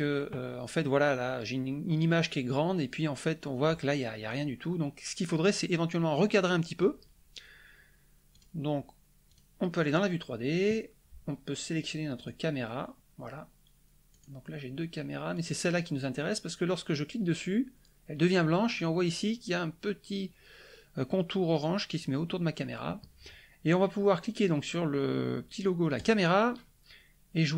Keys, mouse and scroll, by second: 8.3 click, 9.2 click, 12.1 click, 14.1 click, 15.3 click, 25.9 click.